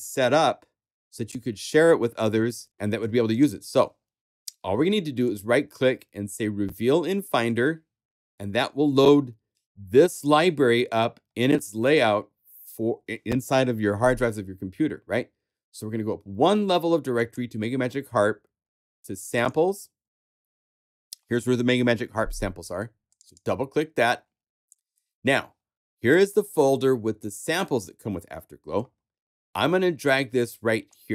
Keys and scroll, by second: 3.6 super+w.